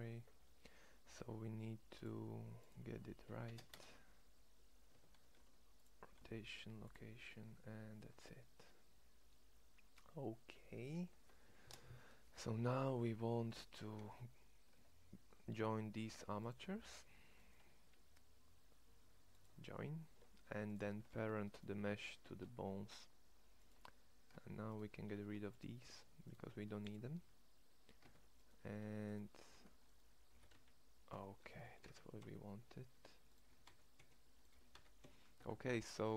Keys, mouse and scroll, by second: 4.8 Tab, 5.2 ctrl+a, 6.1 ctrl+a, 7.5 Tab, 10.7 Tab, 13.9 Tab, 14.7 Tab, 22.3 ctrl+p, 24.2 Tab, 25.1 x, 26.4 x, 28.0 Tab, 29.4 ctrl+Tab, 30.3 g, 31.5 g, 33.4 g, 34.5 g.